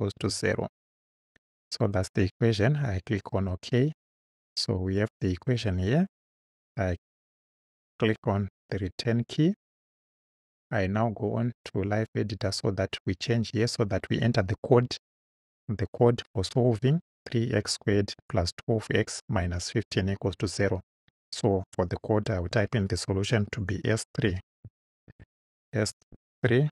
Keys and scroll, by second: 0.1 0, 8.7 Return, 22.5 s, 24.3 BackSpace, 25.1 shift+s, 26.5 3.